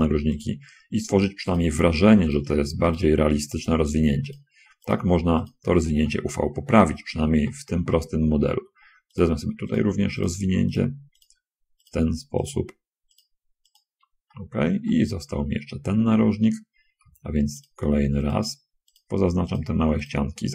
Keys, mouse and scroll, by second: 0.3 shift+right click, 2.6 shift+right click, 3.9 shift+right click, 4.6 shift+right click, 5.0 shift+right click, 5.8 shift+right click, 6.3 shift+middle click, 6.6 click, 7.2 scroll up 1, 7.3 scroll down 1, 7.7 middle click, 8.6 scroll up 1, 9.2 shift+right click, 10.0 shift+right click, 10.5 shift+right click, 10.8 shift+middle click, 11.5 shift+middle click, 12.6 shift+right click, 13.4 shift+right click, 14.6 shift+middle click, 15.3 middle click, 16.4 middle click, 17.9 shift+right click, 19.2 shift+right click, 20.4 shift+right click.